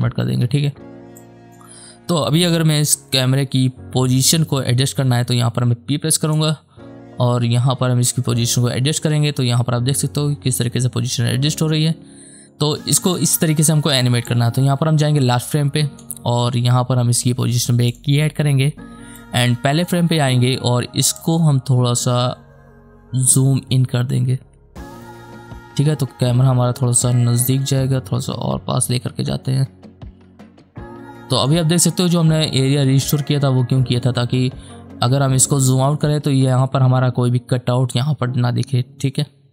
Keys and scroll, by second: 3.5 p.